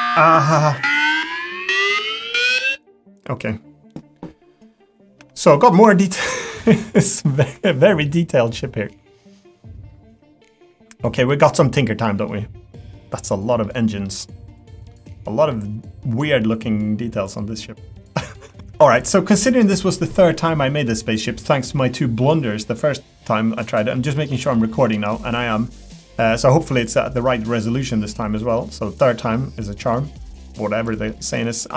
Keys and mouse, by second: 5.2 Tab, 5.4 click, 5.8 middle click, 6.7-8.0 middle drag, 8.4 middle click, 9.6-11.0 middle drag, 11.3-12.3 middle drag, 12.8 middle click, 14.0 middle click, 15.4 middle click, 16.2-18.1 middle drag, 25.7 middle click, 28.6 middle click, 29.3 middle click, 30.3 middle click, 30.9 middle click, 31.3 middle click.